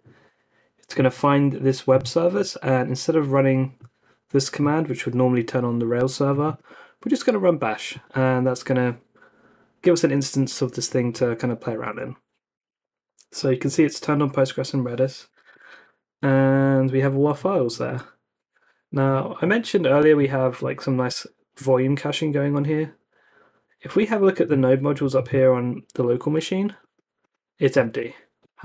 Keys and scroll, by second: 11.8 Return, 15.0-15.8 typing.